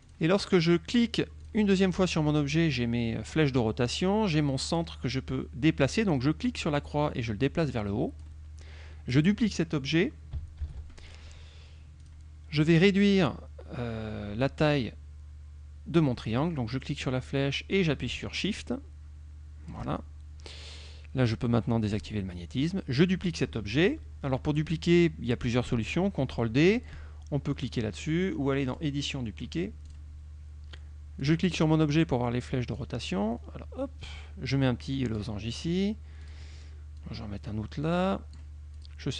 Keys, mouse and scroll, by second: 0.1 click, 0.7 click, 1.0 click, 1.5 click, 6.8-8.5 drag, 10.7 ctrl+d, 12.1 click, 17.1-20.0 drag, 22.1 click, 28.8 click, 29.9 click, 31.3 click, 32.9-35.5 drag, 35.6 click, 36.3 click, 37.1-38.6 drag, 38.9 click.